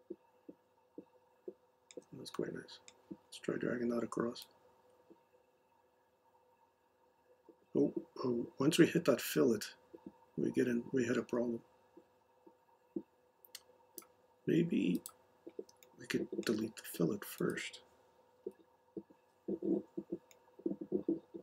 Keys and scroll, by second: 18.4 Delete.